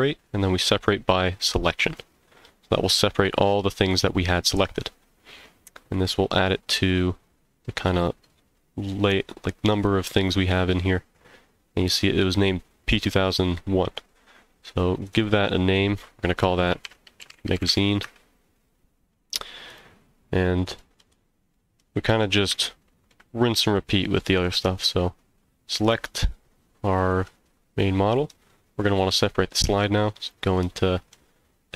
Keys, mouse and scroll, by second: 5.4-6.0 scroll down 3, 6.6 scroll down 4, 14.9 click, 15.1-19.0 drag, 19.7 click, 20.4-20.8 scroll down 1, 20.8 z, 21.5-22.1 middle drag, 22.6-23.1 shift+middle drag, 23.4-24.2 middle drag, 24.7 click, 29.7 Tab, 30.5 middle click, 31.3 scroll up 1.